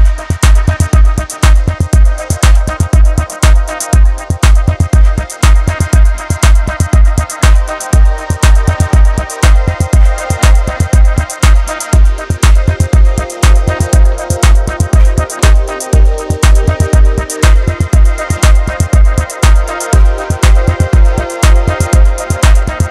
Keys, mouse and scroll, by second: 0.9 click, 1.5 shift+middle click, 2.0 ctrl+shift+click, 2.8 click, 4.0 KP_1, 5.0-5.3 scroll down 1, 8.3-11.4 scroll up 2, 16.3 alt+z, 18.4 click, 20.1 click, 21.6 shift+click.